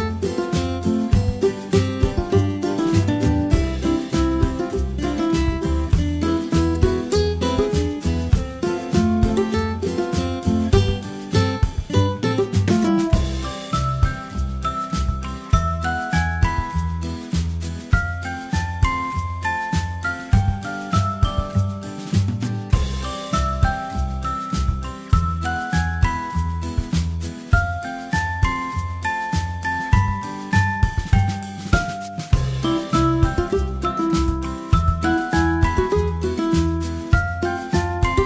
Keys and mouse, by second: 0.6 a, 1.3 a, 4.5-5.5 middle drag, 5.7-6.7 middle drag, 11.4 a, 32.5 ctrl+alt+s, 36.3 z, 36.9 z, 37.9 a.